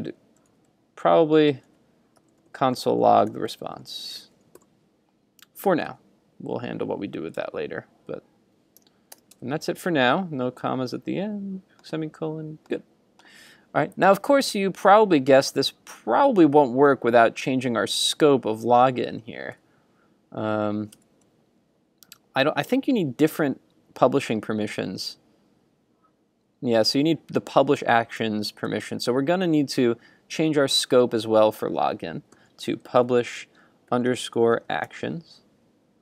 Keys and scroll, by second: 9.5 super+Tab, 19.5 super+s, 21.1 super+Tab, 28.2 super+Tab.